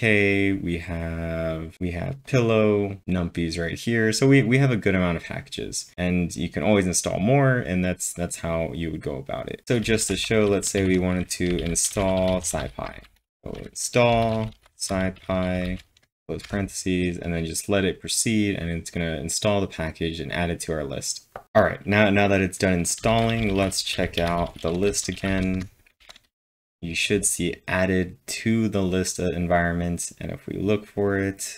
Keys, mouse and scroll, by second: 0.1 scroll up 2, 2.2 double click, 3.0 click, 3.0 scroll down 1, 4.7 scroll up 4, 7.2 scroll up 2, 7.4-8.2 typing, 7.7-8.2 scroll down 5, 8.8-9.6 scroll down 3, 9.6-16.6 typing, 23.0 shift+Num_Lock, 23.0-26.0 typing, 26.4 Return.